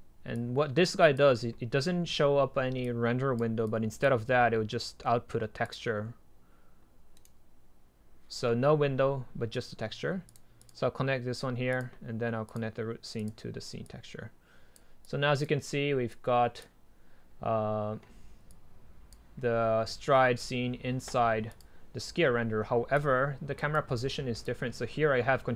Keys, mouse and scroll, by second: 0.5-3.1 middle drag, 3.8-7.2 drag, 7.2-7.9 right drag, 10.8-14.2 drag, 24.5 click, 24.9 click.